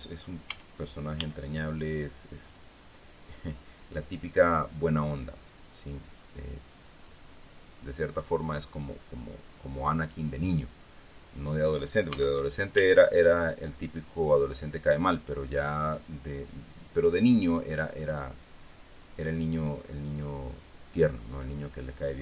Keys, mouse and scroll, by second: 1.0 a, 1.7 b, 2.3 click, 5.6-7.8 drag, 8.6-10.2 drag, 12.7 a, 13.9-15.2 drag, 13.9 b, 15.5-16.7 drag, 17.7-18.8 drag, 19.8-21.6 drag.